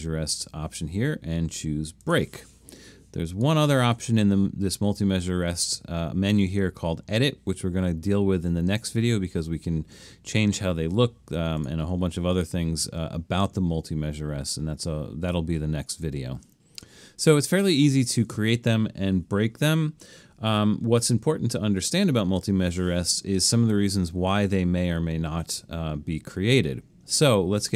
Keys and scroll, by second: 21.2 alt+super+..